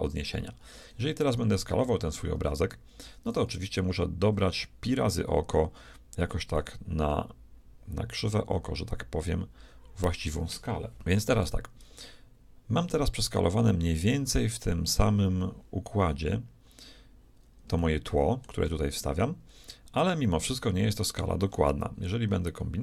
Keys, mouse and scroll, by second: 2.4 a, 3.8-5.8 drag, 11.0-12.8 shift+middle drag, 17.4 shift+middle click, 18.1-19.8 shift+middle drag.